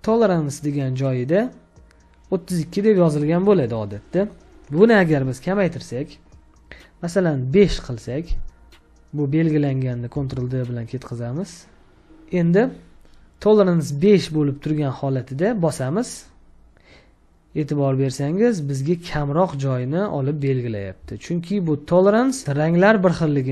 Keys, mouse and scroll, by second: 10.2 ctrl+d, 20.8 space, 21.2 ctrl+click, 22.3 space.